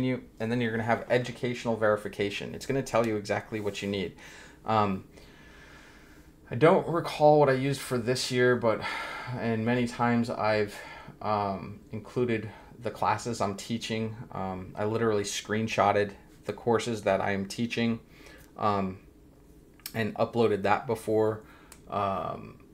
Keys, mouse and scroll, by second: 0.0-3.7 scroll down 1.